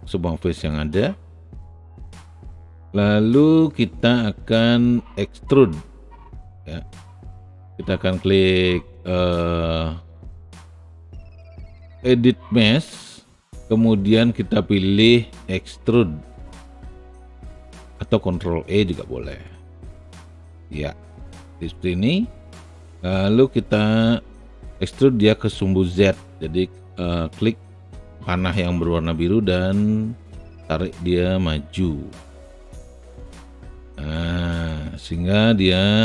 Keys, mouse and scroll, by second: 1.4 alt+click, 2.3 alt+right click, 22.2-25.5 alt+drag, 29.3-32.4 drag, 32.8-33.9 alt+drag, 34.1 alt+middle click, 35.0 alt+click.